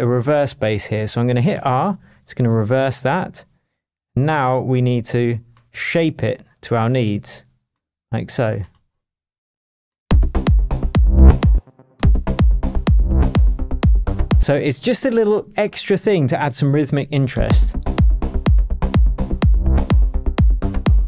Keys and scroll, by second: 1.5 r, 10.0 space, 11.5 space, 17.3 space.